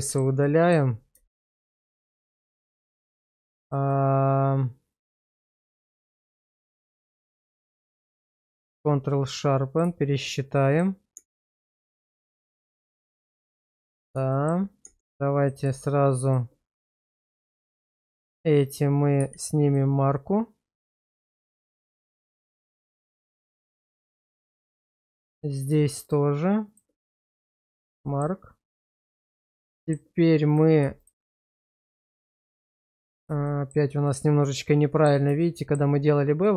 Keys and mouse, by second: 0.0 shift+middle click, 0.4 middle click, 1.3 shift+middle click, 2.2 middle click, 3.5 shift+middle click, 3.9-6.0 middle drag, 6.5 shift+middle click, 6.8 Tab, 7.4 q, 9.1-9.8 middle drag, 10.2 middle click, 11.1 Tab, 12.2 shift+middle click, 12.6 middle click, 14.3 shift+middle click, 14.8 Tab, 16.2 click, 16.8 middle click, 17.4 middle click, 19.2 q, 20.2-22.6 middle drag, 23.2 middle click, 24.8 middle click, 25.2 shift+middle click, 26.0 shift+click, 27.1 q, 28.0 middle click, 28.8 middle click, 29.2 Tab, 29.8 shift+middle click, 31.8 shift+click, 32.4 middle click, 33.5 middle click, 34.1-35.1 middle drag, 35.5 shift+middle click, 36.4 middle click.